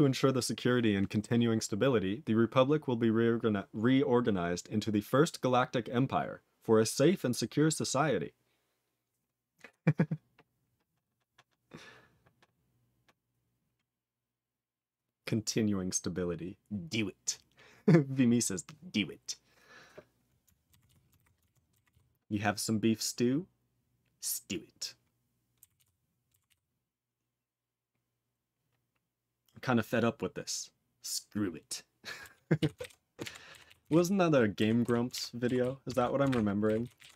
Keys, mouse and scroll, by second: 20.8 ctrl+s, 21.1 ctrl+alt+b, 21.4 ctrl+alt+f, 21.8 ctrl+s, 25.7 ctrl+s, 26.4 ctrl+s, 32.5 ctrl+s, 32.7 ctrl+alt+b, 33.2 ctrl+alt+f, 33.6 ctrl+s, 33.8 ctrl+alt+b, 34.8 ctrl+s, 35.1 ctrl+alt+f, 35.6 ctrl+s, 36.2 ctrl+alt+b, 36.8 ctrl+s, 36.9 ctrl+n, 37.0 ctrl+a, 37.1 ctrl+k.